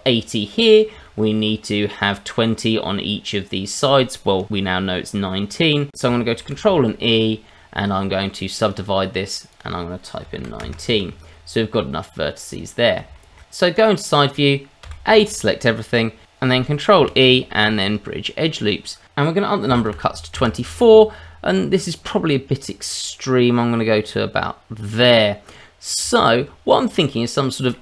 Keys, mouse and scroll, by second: 0.7 scroll down 1, 1.0 shift+middle click, 6.4 ctrl+e, 9.5 click, 12.2 scroll down 1, 12.5 middle click, 13.1 shift+middle click, 13.4 click, 13.4 middle click, 13.6 click, 14.8 a, 17.0 ctrl+e, 20.3 KP_Decimal, 22.6 click, 26.0 Tab, 26.8 click, 27.1 middle click.